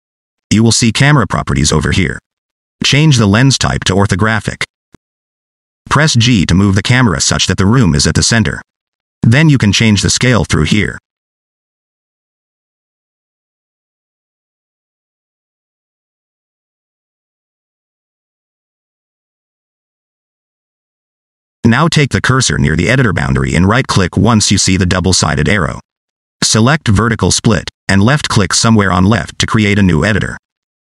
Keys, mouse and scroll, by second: 1.6 click, 3.2 click, 5.9 g, 11.7 click, 12.1 shift+click, 16.5 click, 19.4 g, 26.2 right click.